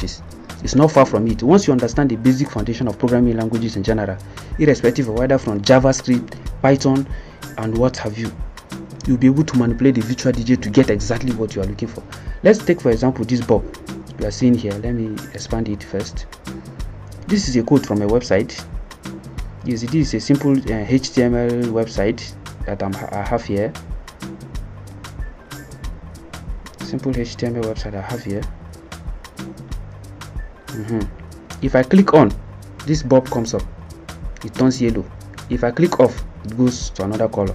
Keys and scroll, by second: 22.5 Print, 23.8 Delete, 25.2-26.7 typing, 28.9 F11, 29.1 F9.